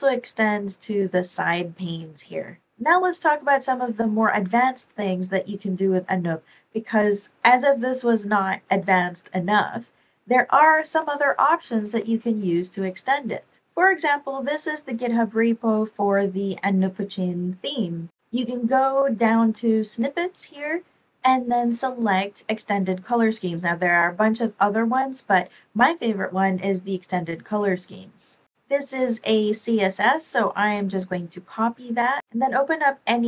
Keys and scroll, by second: 2.3 ctrl+super+r.